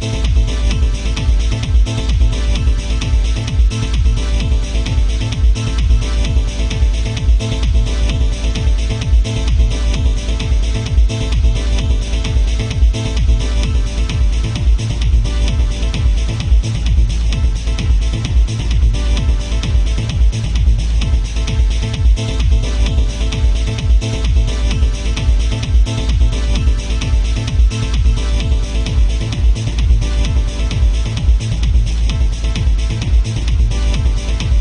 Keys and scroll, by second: 6.4 ctrl+z, 24.7 ctrl+z, 25.8 ctrl+z, 27.6 ctrl+z, 33.9 ctrl+z.